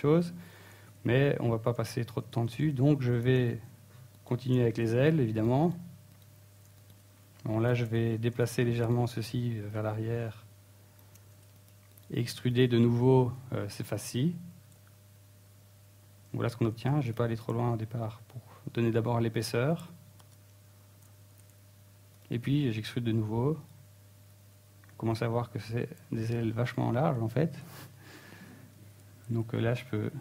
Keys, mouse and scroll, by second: 0.1 click, 1.3 right click, 1.9 shift+right click, 2.2 click, 3.2-3.5 scroll down 2, 3.6 middle click, 4.0 Tab, 4.3 middle click, 4.8 Tab, 5.6 Tab, 5.9 shift+middle click, 6.4 middle click, 6.7 Tab, 7.2 right click, 7.7 ctrl+Tab, 8.5 right click, 8.8 shift+right click, 9.3 right click, 9.8 right click, 10.4 middle click, 11.0 ctrl+Tab, 11.8 alt+right click, 12.8 click, 14.3 ctrl+Tab, 14.9 right click, 15.5 shift+right click, 15.9 middle click, 16.6 shift+middle click, 17.3 e, 20.1 click, 20.2 s, 22.4 click, 22.6 s, 24.3 s, 25.2 click, 25.2 e, 26.7 click, 26.9 middle click, 27.7-28.0 scroll down 2, 28.5 g, 29.6 right click.